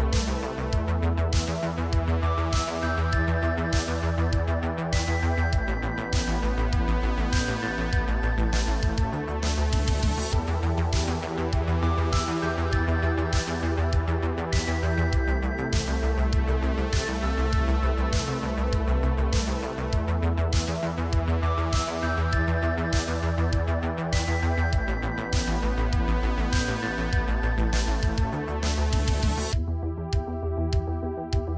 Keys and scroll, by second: 5.6 g, 7.9 Tab, 8.6 Tab, 9.9 1, 10.6 shift+s, 11.1 Tab, 11.8 Tab, 12.4 shift+s, 13.8 Tab, 14.8 Tab, 15.3 2, 16.4 shift+s, 16.8 Tab, 17.7 Tab, 18.5 shift+s, 19.1 Tab, 20.3 Tab, 20.7 2, 22.1 shift+s, 22.8 Tab, 23.7 Tab, 24.5 shift+s, 25.5 Tab.